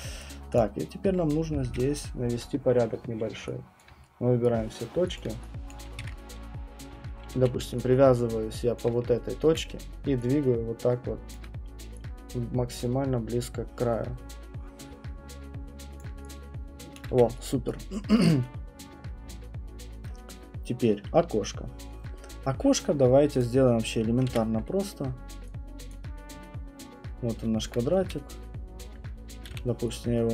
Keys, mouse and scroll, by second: 0.2 right click, 0.6 click, 0.8 middle click, 0.8 middle click, 1.5 middle click, 1.6 ctrl+1, 3.8 alt+click, 4.4 right click, 4.8 middle click, 5.7 click, 6.3 middle click, 6.7-11.9 typing, 8.8 click, 11.4 click, 16.0 click, 17.0 alt+click, 17.1 q, 17.7 right click, 18.1-18.6 scroll, 19.2-19.8 scroll, 20.5-21.0 scroll, 23.4 click, 23.7-24.3 scroll, 24.3 w, 25.9 click, 26.9-27.4 scroll, 27.4 scroll, 27.7 alt+middle click, 28.0 r, 29.5 r.